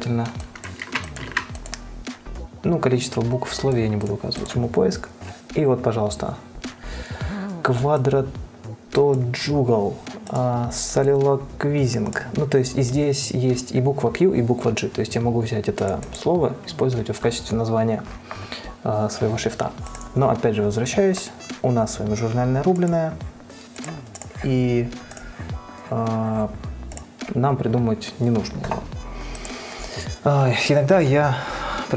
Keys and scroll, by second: 1.1 ctrl+x, 1.5 ctrl+v.